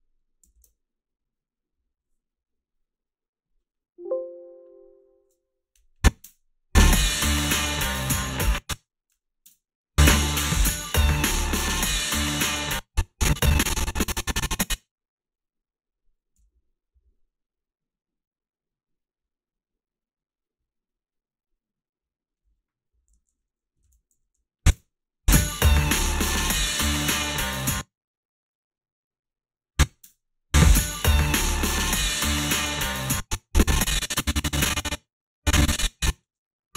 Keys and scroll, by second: 0.6 alt+shift+s, 6.3 space, 8.2 space, 9.4 space, 12.5 space, 16.4 f, 23.2 a, 23.8 ctrl+r, 24.1 a, 24.7 space, 27.7 space, 30.1 space, 32.9 space, 36.3 space.